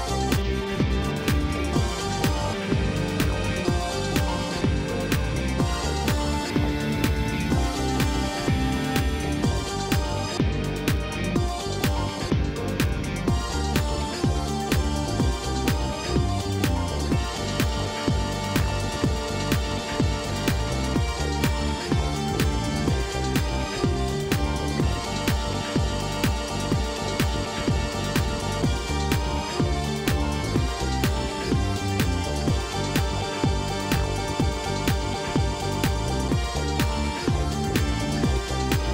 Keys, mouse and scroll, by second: 0.2 ctrl+r, 0.8-1.1 scroll down 1, 1.1 shift+middle click, 1.6 ctrl+r, 4.2 shift+middle click, 5.0-5.5 scroll up 2, 5.5 ctrl+r, 6.2-6.8 scroll down 4, 6.8 ctrl+r, 9.0-9.4 scroll up 3, 9.4 shift+middle click, 9.7-10.1 scroll up 3, 10.5 ctrl+r, 12.9 ctrl+r, 14.3 ctrl+r, 18.0 middle click, 18.6 scroll down 1, 18.9-19.9 middle drag, 19.9 scroll down 1, 20.0 middle click, 20.3 scroll up 1, 20.6 middle click, 21.2 ctrl+r, 23.8 ctrl+r, 25.5 ctrl+z, 26.0 ctrl+r, 27.7 ctrl+z, 28.1 ctrl+r, 29.4 middle click, 30.1 scroll up 2, 30.4 shift+middle click, 31.2 KP_1, 31.6-31.9 scroll up 2, 31.9 shift+middle click, 32.6 ctrl+r, 34.3 ctrl+r, 36.8 middle click, 37.6 ctrl+r.